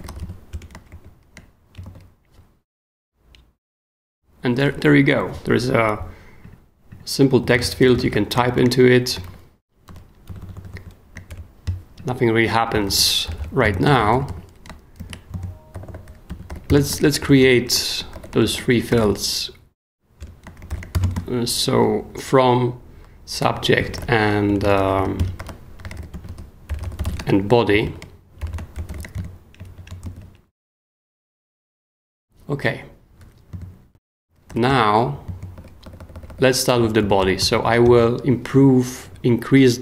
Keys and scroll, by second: 0.0-0.9 typing, 1.7 shift+super+9, 1.8 shift+super+s, 2.4 super+s, 7.2-8.8 typing, 11.3 alt+shift+BackSpace, 12.2 shift+BackSpace, 12.7 k, 13.3 BackSpace, 13.8 super+k, 14.7 shift+k, 15.0 shift+a, 15.7 shift+super+h, 16.0-21.4 typing, 20.2 Return, 23.5-29.4 typing, 30.0 super+s, 33.9 w, 34.5 i, 34.7 Return, 35.3 super+Return, 35.4 super+Escape, 35.5-38.3 typing, 38.5 Down.